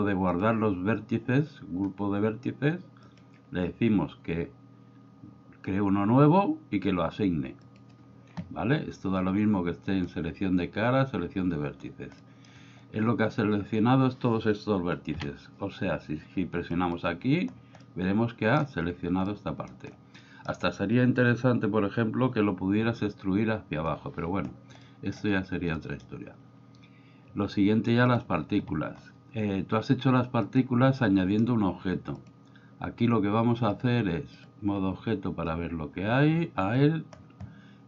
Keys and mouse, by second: 0.4 click, 3.1 click, 7.7 click, 9.9 click, 12.1 middle click, 15.1 a, 16.7 click, 17.8-18.6 middle drag, 19.2-19.7 middle drag, 20.1 middle click, 24.8 middle click, 25.7 middle click, 28.1 click, 30.5 click, 32.1 click, 33.8 click.